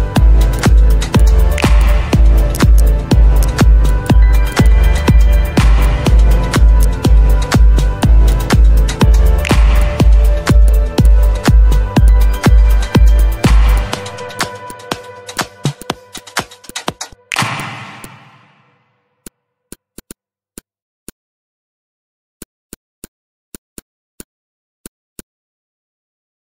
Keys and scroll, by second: 9.9 ctrl+d, 16.5 z, 18.5 Delete.